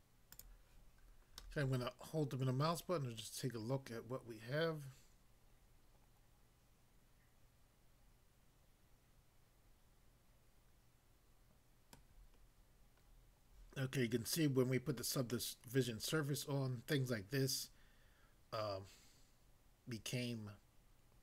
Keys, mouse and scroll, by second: 0.3 click, 0.5 click, 1.4 middle click, 11.9 middle click, 12.5 scroll up 1, 13.1 scroll up 1.